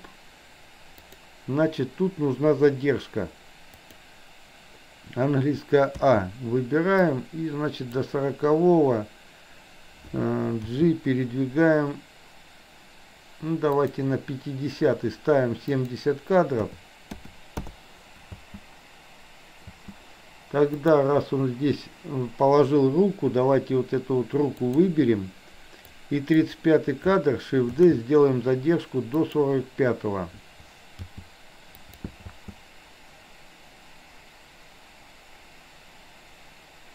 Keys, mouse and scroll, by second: 1.0 click, 3.9 click, 6.1 a, 7.0-8.1 drag, 10.6 g, 15.8-17.8 drag, 18.4 space, 19.6 space, 20.9 click, 24.6 click, 25.9-26.4 drag, 27.8 shift+d, 31.1 g, 32.4 space.